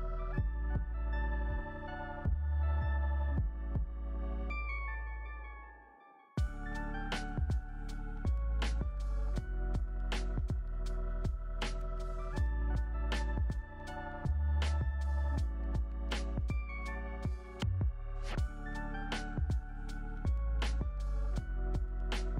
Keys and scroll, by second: 8.4 ctrl+c, 11.0 z, 11.9 ctrl+v, 17.1 x, 18.3 z, 20.8 ctrl+v.